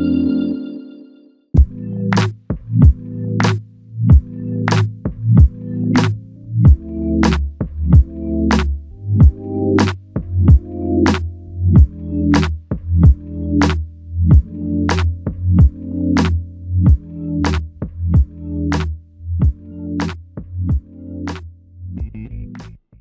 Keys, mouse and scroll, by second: 2.0 ctrl+scroll up 1, 5.0 ctrl+scroll down 2.